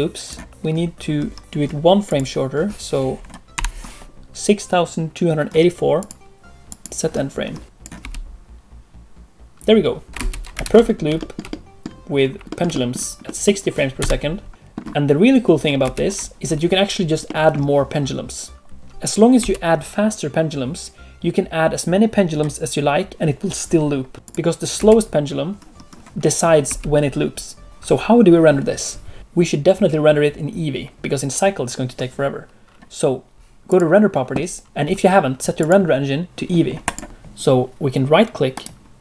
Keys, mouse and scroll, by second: 3.5 Left, 5.9 click, 7.0 click, 7.6 space, 7.9 space, 10.6 ctrl+space, 10.8 alt+a, 11.1 scroll down 2, 11.4 shift+middle click, 12.1 middle click, 12.4 scroll up 1, 12.7 shift+middle click, 14.1 middle click, 15.8 ctrl+space, 17.2 middle click, 18.5 click, 18.5 space, 19.3 space, 24.1 click, 24.1 space, 24.2 click, 24.7 space, 26.6 space, 33.6 click, 34.6 click, 35.6 click, 38.5 right click.